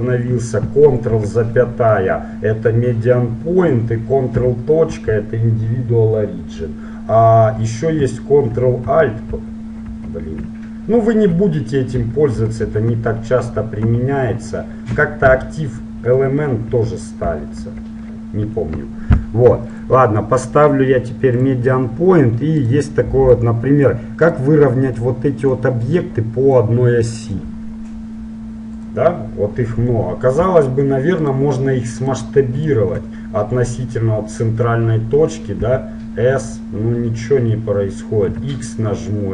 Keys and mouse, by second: 1.1 ctrl+,, 4.5 ctrl+., 8.9 ctrl+alt+,, 9.3 ctrl+alt+., 9.9 ctrl+alt+/, 11.3 shift+., 12.4 shift+., 12.4 shift+,, 12.7 shift+/, 13.9 ctrl+/, 15.0 /, 15.3 ., 16.7 ,, 17.3 ., 17.6 /, 19.9 click, 20.5-21.8 drag, 22.7-25.3 right drag, 23.5-25.3 drag, 27.9 click, 28.9-34.5 right drag, 35.8 s.